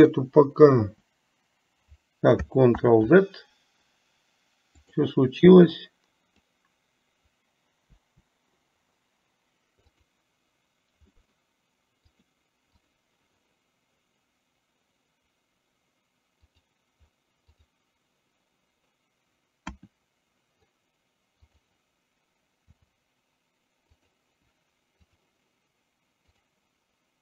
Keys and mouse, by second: 1.0 Delete, 2.9 ctrl+z, 4.9 click, 5.9-6.6 drag, 8.1 Delete, 10.0 drag, 12.3 click, 12.9 click, 16.5 click, 17.8 drag, 21.5 click, 22.8 r, 25.1 click, 26.4 click.